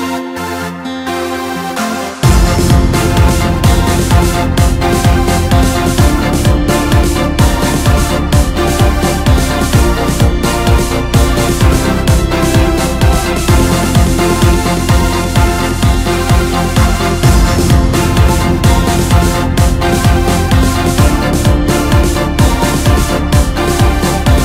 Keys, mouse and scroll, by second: 1.1 s, 2.7 KP_1, 3.3-3.8 scroll up 2, 3.8 g, 5.8 KP_3, 6.4-7.3 scroll up 6, 7.3-8.2 scroll down 4, 8.2-8.9 ctrl+KP_2, 9.2 KP_Decimal, 10.0-10.4 scroll up 2, 10.4 s, 12.5-12.9 scroll down 3, 12.9-13.3 scroll up 3, 13.3 s, 14.4 KP_1, 15.2-15.5 scroll up 1, 16.4 g, 18.8 r, 21.7 g, 23.2-23.7 scroll down 2, 23.7 KP_3, 24.3-24.4 scroll down 1.